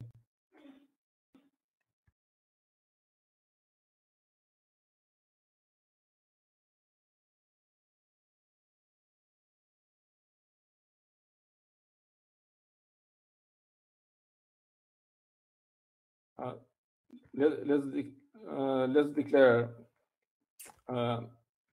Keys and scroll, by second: 4.7-10.0 typing.